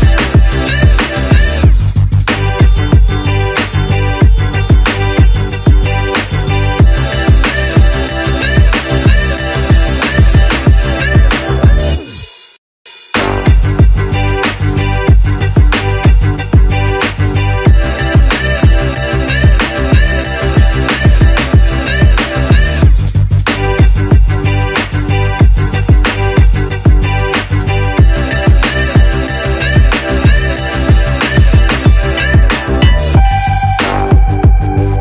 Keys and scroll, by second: 5.6 Return, 13.8 alt+shift+super+e.